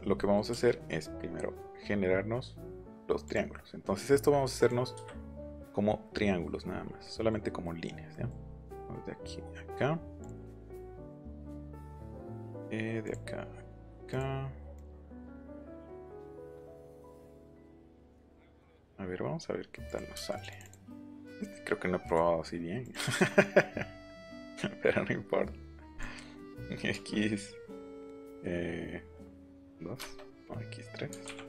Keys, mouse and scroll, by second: 0.5 l, 3.2 click, 4.6 click, 5.4 click, 6.6 scroll up 2, 7.0 middle click, 7.6 middle click, 8.0-8.6 scroll down 2, 8.1 middle click, 9.8 scroll down 1, 10.2 click, 10.3 scroll down 1, 10.7-11.0 scroll up 2, 11.7 Escape, 13.0 click, 14.0 click, 14.7 click, 15.4-16.1 scroll down 1, 15.5 middle click, 16.4 middle click, 16.9 click, 18.0 click, 18.7 click, 19.8 click, 20.3 click, 20.5 click, 20.6 click, 21.0 q, 22.0 click, 22.8 click, 25.8 click, 29.4 2, 29.9 Return, 31.0 x.